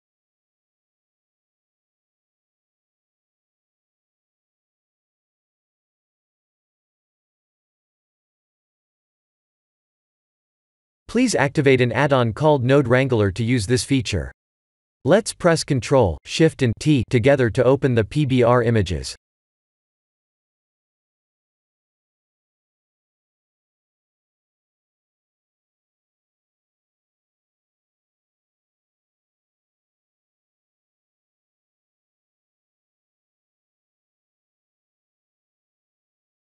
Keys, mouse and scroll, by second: 1.2 click, 7.7 click, 8.6 click, 10.0 click, 10.7 middle click, 11.5-12.4 scroll down 4, 11.8 middle click, 12.6 click, 14.0 click, 16.5 click, 17.3 ctrl+shift+t, 18.3 click, 18.8 shift+click, 20.1 click, 21.0 click, 23.7 middle click, 24.7-25.2 scroll up 4, 25.2 middle click, 26.7 scroll down 4, 27.1 shift+middle click, 28.5-29.8 scroll up 5, 30.0-32.1 scroll down 6, 31.2 middle click.